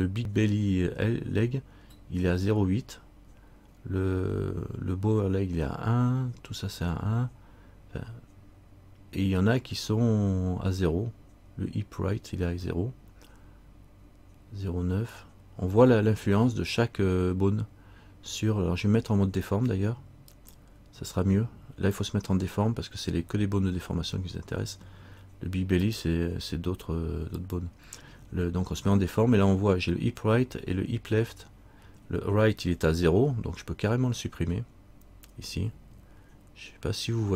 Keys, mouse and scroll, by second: 20.5 click, 26.0 click.